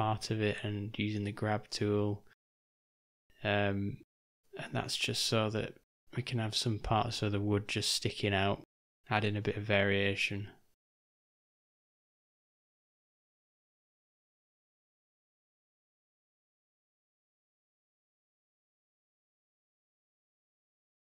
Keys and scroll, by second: 2.6 v, 5.0 3, 6.8 [, 6.9 [, 7.2 [, 11.9 ], 12.1 ], 12.2 ], 12.4 ], 14.7 ;, 19.7 m.